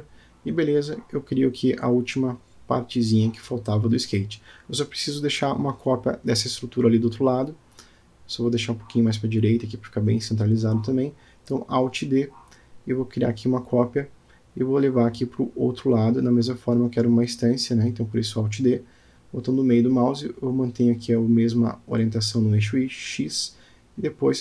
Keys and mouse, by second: 3.1-4.5 middle drag, 5.0-6.0 middle drag, 10.3 g, 14.4-15.1 middle drag, 17.0-17.4 shift+middle drag, 18.8 alt+d, 21.7 g.